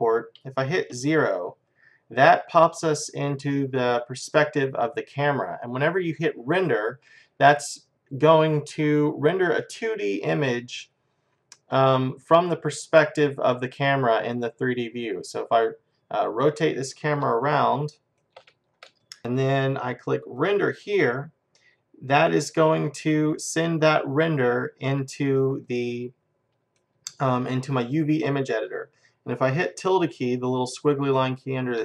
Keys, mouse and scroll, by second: 1.0 KP_0, 15.3-17.0 middle drag, 17.7-19.2 middle drag, 20.4-22.3 drag, 23.3-27.6 middle drag.